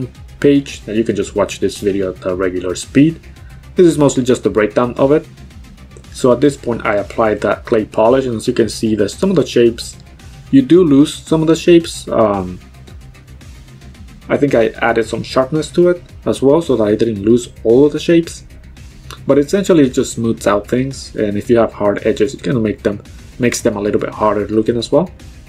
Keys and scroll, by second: 2.5 b, 22.7 x.